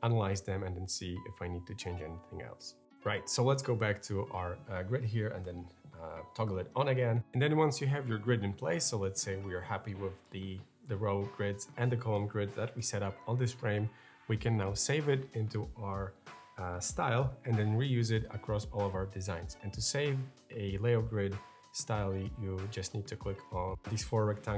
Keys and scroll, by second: 5.3 ctrl+g.